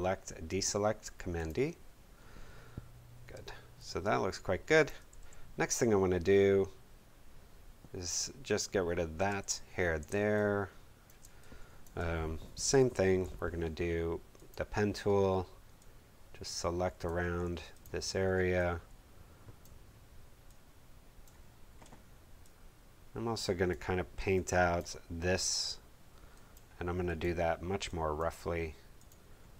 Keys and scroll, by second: 3.3 space, 5.1 v, 9.2 space, 12.6 p.